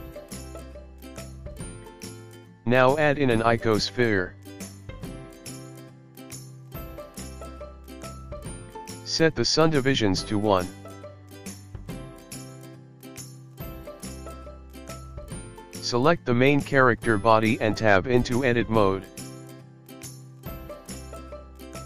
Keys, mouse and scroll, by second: 1.2 space, 1.7 space, 1.8 click, 2.0 scroll down 4, 2.1 middle click, 2.3-3.3 scroll up 3, 2.8 Tab, 2.8 click, 3.7 shift+a, 9.1 click, 12.9 g, 16.5 s, 18.7 click, 19.8 Tab, 20.3 click.